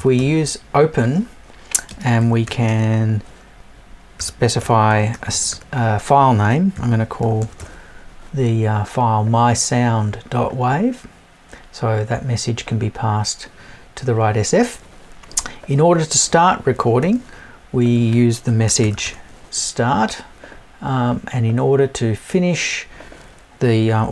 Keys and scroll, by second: 4.6 BackSpace.